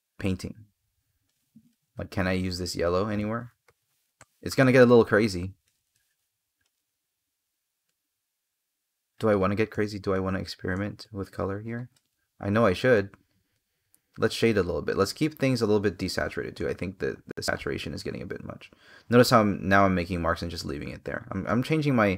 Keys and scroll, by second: 4.0 space, 5.7 space.